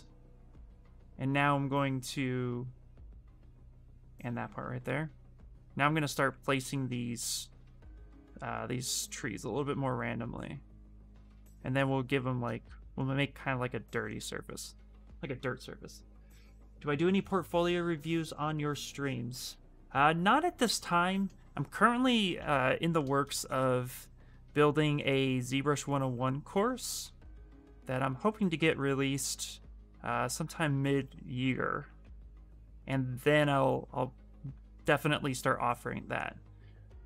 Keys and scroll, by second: 12.2 space.